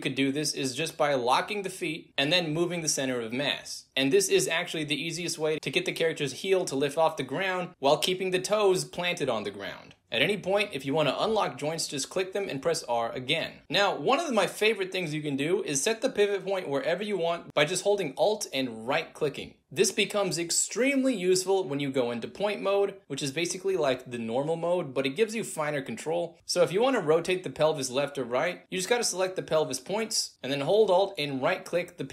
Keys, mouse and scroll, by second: 0.4 shift+z, 1.3 z, 2.3-5.6 drag, 5.6 r, 6.1 click, 6.8 click, 7.5-11.0 drag, 11.8 click, 11.9 click, 12.8 r, 13.2 click, 15.5 click, 17.9 alt+right click, 18.8 e, 19.0-21.7 drag, 21.9 w, 22.4 ctrl+z, 23.5 click, 24.9 click, 25.9 click, 26.8 alt+drag, 27.0 alt+right click, 27.6 alt+middle drag, 28.5 click, 29.1-29.5 shift+drag, 30.4 alt+click, 30.8 alt+right click, 31.4 alt+right drag, 31.7-32.1 alt+drag.